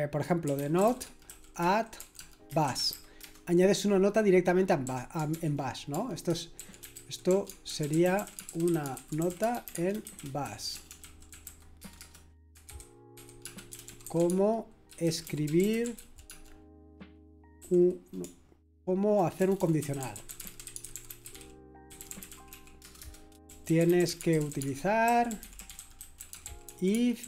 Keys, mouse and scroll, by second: 0.2-3.4 typing, 4.8-27.2 typing.